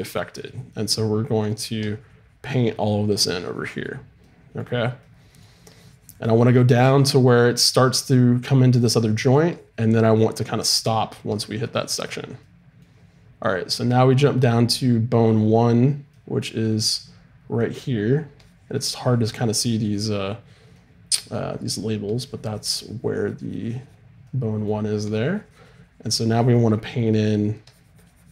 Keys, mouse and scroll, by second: 0.9-7.0 middle drag, 2.0-5.0 drag, 5.7-9.0 drag, 9.0-12.3 middle drag, 9.5-13.5 drag, 12.5-14.2 middle drag, 14.2-16.1 drag, 16.1-18.4 middle drag, 18.4-20.8 drag, 20.8-23.0 middle drag, 23.0-24.2 drag, 24.2-26.7 middle drag, 26.7 click, 26.9-28.3 middle drag, 27.7-28.3 drag.